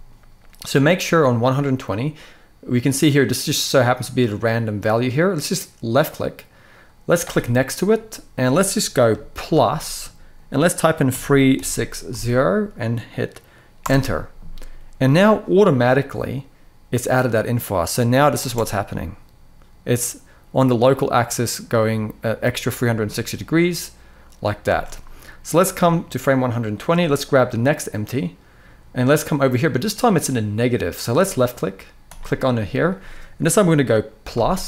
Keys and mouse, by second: 5.7-13.5 drag, 17.0 click, 18.2 space, 24.4 space, 25.3-26.6 drag, 27.2 click, 30.9-34.6 drag.